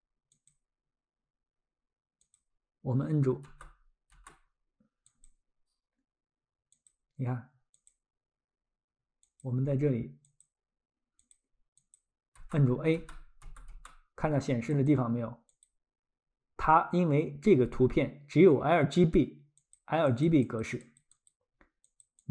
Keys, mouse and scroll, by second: 2.2 click, 3.4 a, 5.1 click, 12.4 a, 13.4 typing, 14.8 click, 19.6 click, 20.6 click, 20.8 click, 21.2 click, 21.3 click, 21.8 click.